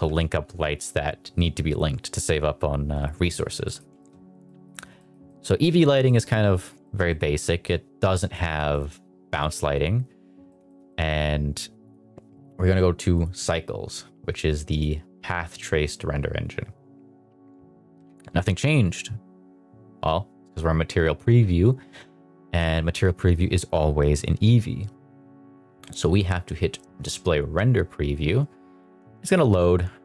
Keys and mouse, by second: 3.6 middle click, 3.9 shift+middle click, 4.3 middle drag, 4.9 middle drag, 5.2-5.5 middle drag, 5.9 middle drag, 6.7 shift+middle drag, 7.0 middle drag, 9.2 x, 10.4 middle click, 10.6 shift+middle drag, 10.8 middle drag, 12.1 n, 13.1-14.8 drag, 27.5 click.